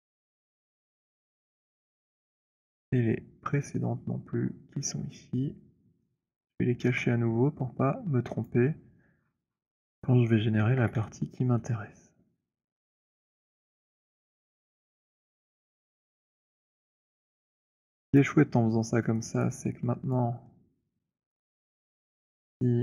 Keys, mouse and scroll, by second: 0.2 middle click, 0.9 alt+click, 2.6 click, 4.2-4.6 scroll, 6.2 alt+scroll, 6.9 alt+right click, 7.8-8.4 scroll, 8.4 shift+click, 9.2-10.8 scroll, 10.8 ctrl+h, 12.1-14.0 scroll, 14.5 click, 15.3 F7, 15.3-16.9 scroll, 19.5 alt+right click, 20.3 alt+click, 21.5 alt+middle click.